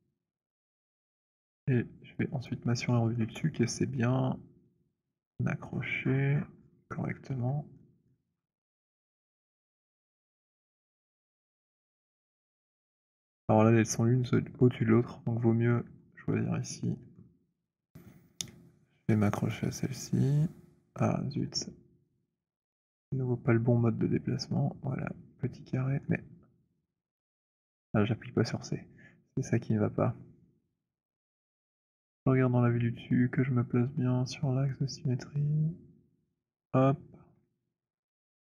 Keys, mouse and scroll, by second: 1.2 right click, 1.4 click, 2.6 click, 5.5-7.3 scroll, 8.1-8.7 alt+scroll, 8.7-9.2 alt+scroll, 9.2 alt+middle click, 9.8 alt+middle click, 10.5-11.7 alt+middle click, 12.2 alt+middle click, 12.8 alt+middle click, 13.0 alt+middle click, 13.7 alt+middle click, 15.9 middle click, 16.3 middle click, 21.2 shift+middle click, 22.2 click, 24.5 click, 26.0 shift+middle click, 26.9 click, 28.3-36.5 c, 36.7 middle click, 36.7 c, 37.1 middle click, 37.3 middle click, 37.8 alt+middle click.